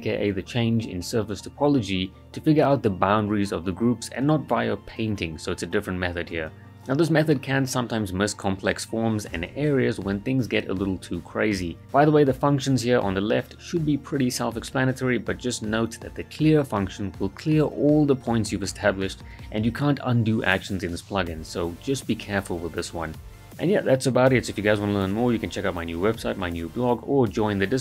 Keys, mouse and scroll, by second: 0.4 click, 4.2-5.1 scroll up 1, 5.1-6.0 right drag, 15.0 scroll up 1, 15.6-16.9 right drag, 21.7 click.